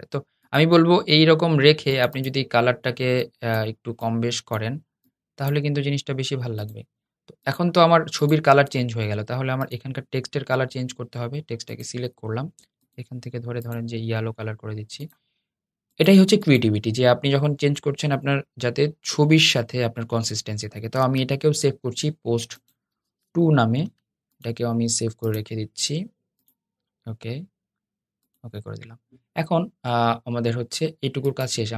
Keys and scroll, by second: 20.7 shift+super+s.